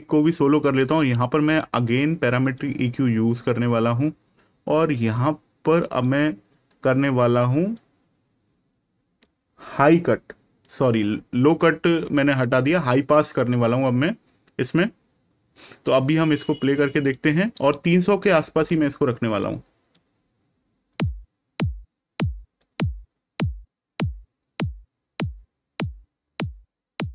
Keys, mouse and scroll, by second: 1.0 click, 5.7 click, 11.9 click, 16.5 click, 20.8 click.